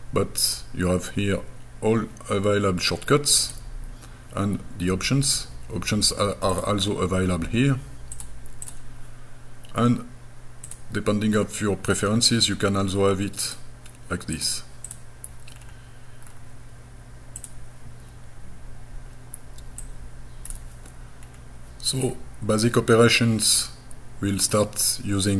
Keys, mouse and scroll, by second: 0.5 click, 3.5 click, 6.5-7.9 drag, 8.2 click, 10.7 click, 13.5 click, 14.4 click, 14.9 click, 15.6-16.2 scroll down 2, 16.2 scroll down 1, 16.2-16.9 scroll up 4, 17.4 click, 19.8 click, 21.2 scroll down 2, 22.0-22.8 scroll up 4, 23.6 middle click.